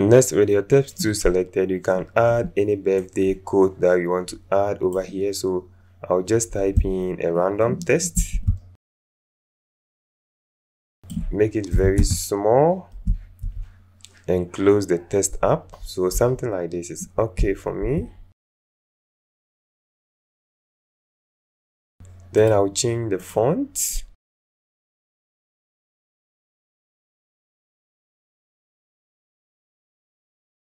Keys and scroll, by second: 8.1 ctrl+a, 11.7 KP_2, 11.9 Return, 13.4 alt+Up, 17.8 alt+Up, 24.4-25.2 typing, 28.0 Up, 28.4 Up, 28.5 Up, 28.6 Up, 28.7 Up, 28.8 Up, 30.2 alt+space.